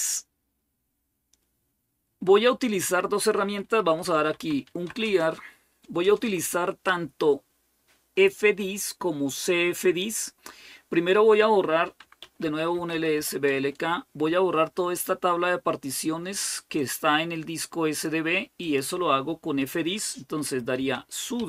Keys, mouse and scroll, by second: 1.9-2.7 scroll down 1, 3.7-5.2 typing, 5.8 Return, 6.0 Return, 11.8-13.6 typing, 14.7 typing, 16.7-20.5 drag, 20.3-21.4 typing.